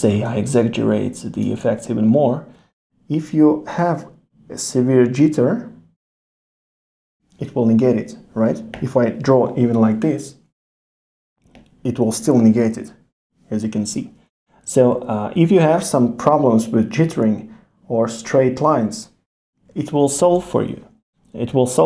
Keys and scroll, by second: 14.3 super+z.